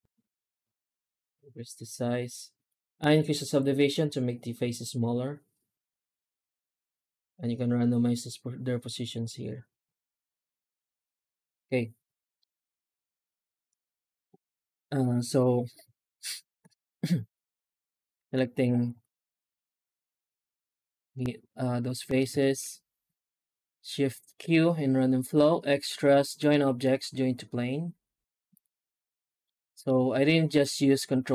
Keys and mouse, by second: 12.2-14.1 middle drag, 16.0 shift+z, 16.5 shift+z, 17.3 alt+a, 17.6 click, 18.3 shift+z, 18.9 alt+shift+z, 19.5 alt+a, 20.8 shift+z, 21.9 middle drag, 22.3 shift+q, 29.4-29.7 middle drag, 30.5 right click, 30.9-31.3 middle drag.